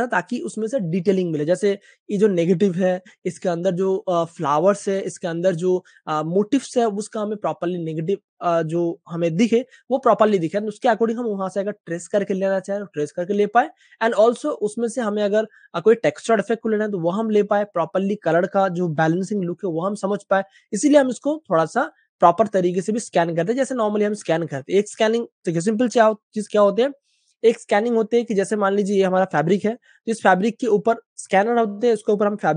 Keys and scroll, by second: 0.5 space, 0.5 space, 0.6 space, 1.7 super+space, 4.5 typing, 7.2 super+space, 7.4 super+space, 9.0 space, 9.0 space, 9.1 space, 27.4 Page_Up.